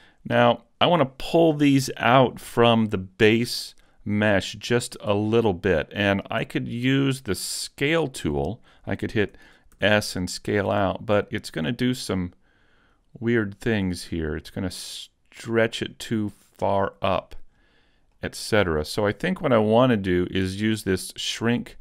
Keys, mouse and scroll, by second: 5.5-6.1 scroll down 1, 6.1 shift+middle click, 9.7 s, 17.3 right click, 18.1 middle click.